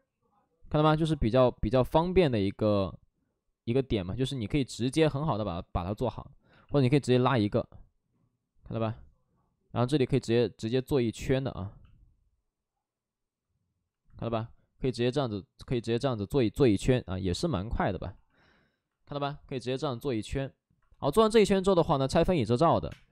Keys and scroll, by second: 0.5 ctrl+z, 3.5 space, 3.7 ctrl+z, 5.7 ctrl+z, 6.4 x, 11.0 ctrl+z, 14.1 2, 14.9 alt+s, 19.9 alt+s, 22.8 3, 22.8 space.